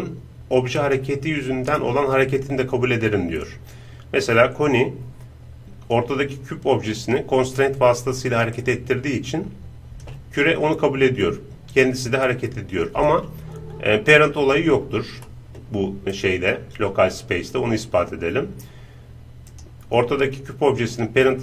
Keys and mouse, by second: 2.0 right click, 8.6-10.8 drag, 11.8-14.1 drag, 14.1-15.3 right drag, 15.3-17.7 middle drag, 17.7-21.4 right drag, 21.2-21.4 drag.